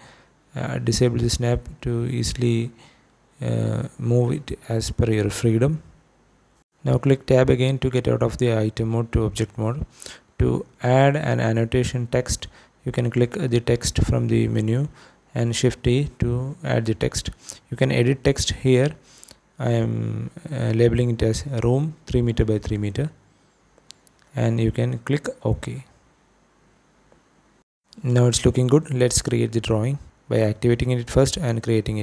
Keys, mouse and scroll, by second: 0.5 g, 1.5 y, 3.4 click, 4.7 Tab, 5.7 Tab, 6.5 shift+middle click, 8.2-10.9 drag, 13.0 shift+right click, 14.2 shift+a, 16.3-27.1 drag, 18.3 shift+o, 30.9 click, 31.9 click.